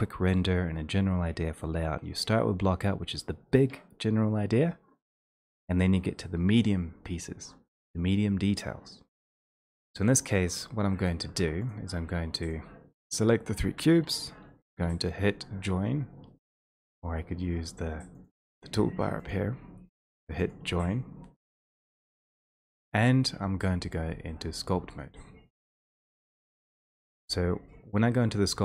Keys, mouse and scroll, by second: 10.7 click, 11.2 1, 11.7 click, 12.7 shift+click, 16.6 click, 20.5-28.6 drag.